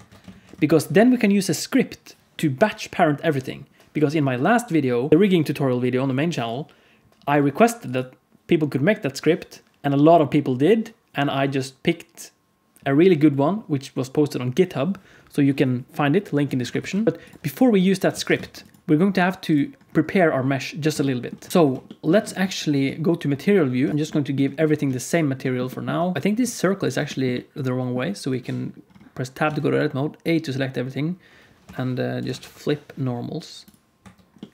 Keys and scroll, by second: 0.2 alt+a, 0.6 ctrl+s, 16.4 alt+a, 16.7 ctrl+s, 18.0 alt+a, 18.4 ctrl+s, 21.5 ctrl+s, 22.3 z, 26.1 alt+a, 28.2 Tab, 29.4 a, 31.6 F3, 33.9 Tab.